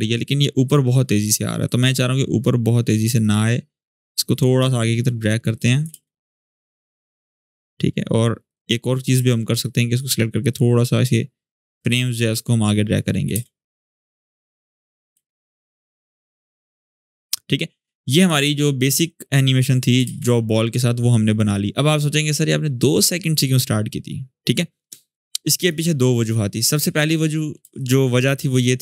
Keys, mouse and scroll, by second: 5.7 space, 7.2 click, 9.7 click, 10.5-11.2 click, 12.0 click, 13.1 space, 14.4-15.1 click, 14.9 space, 18.1 alt+scroll down 1, 19.1-20.0 click, 19.8 space, 24.6-26.4 drag, 26.4-27.4 scroll up 1, 27.4 space, 27.5-28.2 click, 28.2 space.